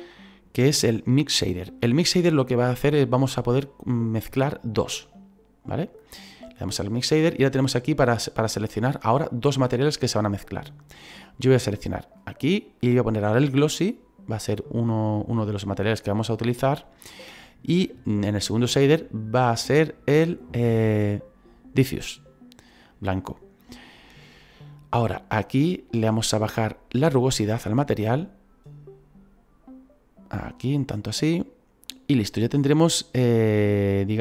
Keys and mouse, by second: 4.9 click, 12.2 click, 13.6 click, 18.7 click, 21.9 click, 26.3 click, 32.7 middle click.